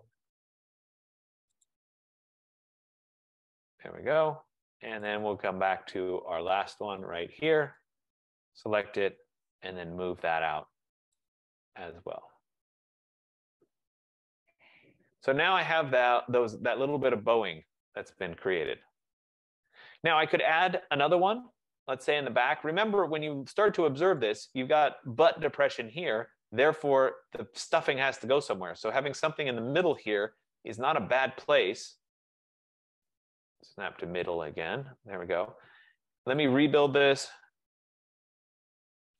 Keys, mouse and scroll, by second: 0.3 typing, 1.7 click, 3.6 click, 5.1 click, 5.8 click, 7.1 click, 7.8 click, 9.2-9.6 typing, 11.4 click, 11.8 F15, 13.0 typing, 14.4 click, 15.8 click, 19.7 right click, 21.3 click, 22.1 middle click, 22.2 middle click, 22.3 middle click, 24.3 right click, 26.8 right click, 30.3 click, 34.5 click, 35.3 Return, 36.6 click, 37.3-37.7 typing.